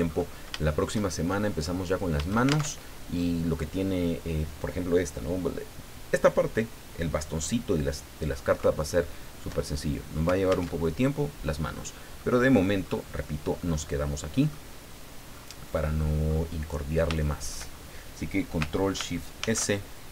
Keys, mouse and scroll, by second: 0.1-0.4 scroll up 2, 0.6 shift+middle click, 1.4 middle click, 2.7 alt+shift+Tab, 10.7 alt+Tab, 11.8-12.2 scroll down 2, 12.2 middle click, 12.8-13.3 scroll up 2, 13.3-13.6 scroll down 2, 13.6-14.7 middle drag, 15.3-16.0 scroll up 2, 16.2 scroll up 2, 16.6-17.0 scroll down 2, 17.2 shift+middle click, 17.7 shift+scroll up 2, 19.4 ctrl+shift+s.